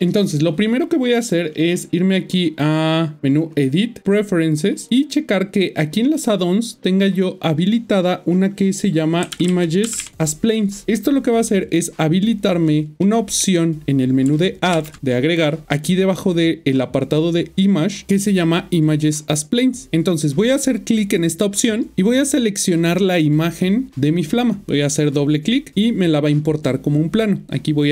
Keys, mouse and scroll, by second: 3.3 click, 9.2-10.0 typing, 12.6-13.0 scroll down 3, 13.0 shift+middle click, 13.7 scroll up 1, 14.7 typing, 19.9 a, 24.7 click, 25.0 double click.